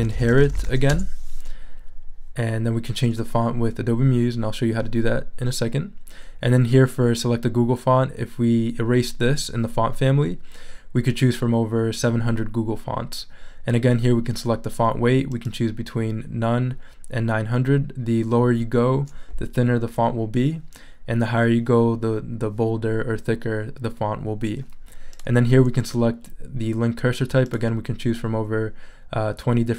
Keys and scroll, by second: 0.0-1.1 typing.